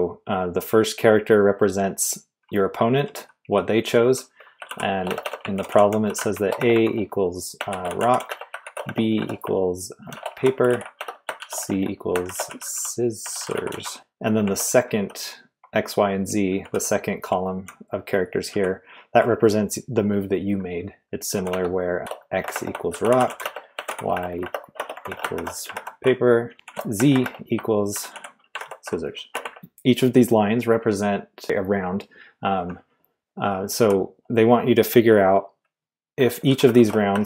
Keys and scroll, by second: 2.3-18.5 typing, 5.1 Return, 5.2 Return, 21.2-25.3 typing, 26.5 Return, 26.6-27.9 typing, 28.6 ctrl+p, 29.3 Escape, 29.5 typing, 33.5 typing, 36.2-37.2 typing.